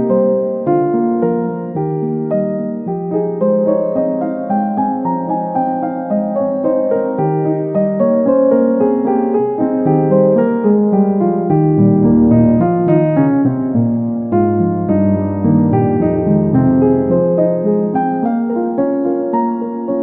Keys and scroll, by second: 15.9 Return.